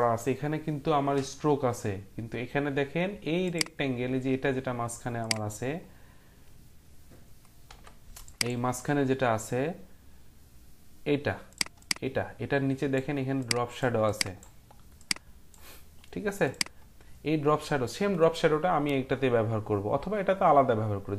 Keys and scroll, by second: 7.6 Print, 8.0 Print.